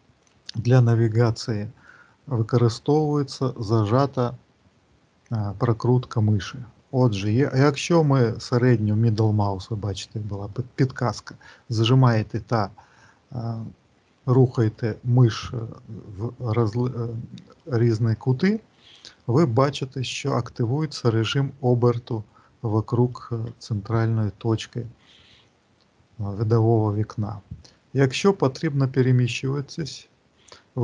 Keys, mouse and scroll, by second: 6.3 middle click, 10.3 middle click, 15.1 middle click, 17.9 middle click, 22.2 middle click, 24.8 middle click.